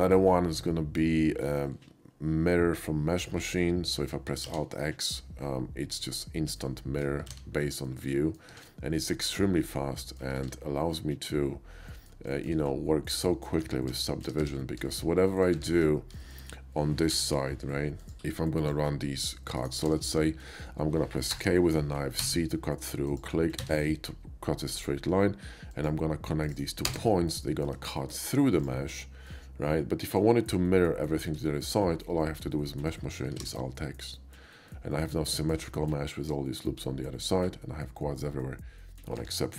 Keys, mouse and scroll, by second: 0.7 middle click, 4.5 alt+x, 6.0 middle click, 6.8 shift+middle click, 7.3 alt+x, 7.9 alt+shift+x, 7.9 shift+middle click, 8.2 shift+middle click, 8.5 alt+x, 9.0 middle click, 9.5 middle click, 9.7 middle click, 10.4 alt+x, 11.0-12.1 middle drag, 12.4 shift+middle click, 13.3 shift+middle click, 13.7 ctrl+z, 14.0 ctrl+z, 14.4 ctrl+z, 14.9 shift+middle click, 15.3 shift+middle click, 15.6 `, 15.9 KP_5, 16.3 middle click, 17.1 k, 18.0 click, 18.6 click, 19.6 click, 20.0 ctrl+z, 20.1 ctrl+z, 20.5 middle click, 21.3 middle click, 21.3 k, 22.2 c, 23.1 click, 23.7 a, 24.6 click, 24.8 right click, 25.8 click, 26.5 click, 26.5 right click, 26.9 space, 27.1 middle click, 27.7 space, 27.8 KP_5, 28.0 middle click, 28.6 click, 29.3 middle click, 31.5 shift+middle click, 32.5 shift+middle click, 33.8 alt+x, 34.7 middle click, 35.3 shift+middle click, 35.9-39.0 shift+middle drag.